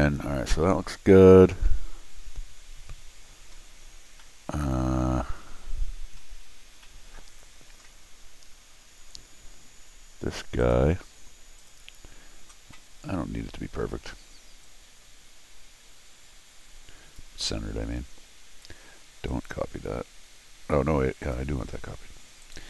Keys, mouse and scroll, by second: 2.2 scroll down 2, 3.6 scroll down 2, 4.2 middle click, 4.9-5.3 scroll down 4, 5.8-6.6 scroll up 6, 6.8 scroll down 2, 10.6 click, 11.6 click, 14.6-17.2 drag, 19.3 click, 21.2 click, 22.4 click.